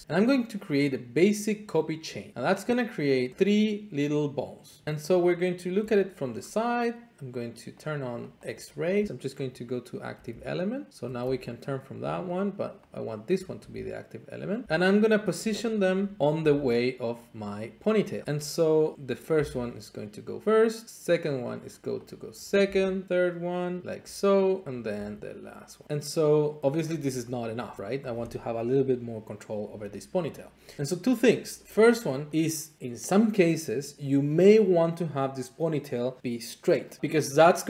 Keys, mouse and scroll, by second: 3.2 middle click, 3.3 middle click, 3.5 scroll up 2, 4.8 middle click, 4.8-5.8 `, 6.3 middle click, 7.8 click, 8.3 click, 8.5 click, 9.5 click, 10.2 r, 11.2 Escape, 12.3 shift+click, 12.9 shift+click, 13.5 r, 14.6 click, 14.6 g, 15.7 click, 15.9-16.4 scroll, 16.2 shift+middle click, 16.4 scroll down 3, 16.4 g, 18.0 click, 18.3-18.9 scroll, 18.9 scroll, 19.0 click, 19.0 scroll down 4, 19.3 g, 21.5 click, 22.3 click, 22.7 g, 23.8 click, 23.9 shift+middle click, 24.7 click, 24.9 g, 26.6 click, 26.8-27.2 scroll, 27.5 middle click, 27.6 shift+middle click, 27.8 middle click, 27.9 shift+middle click.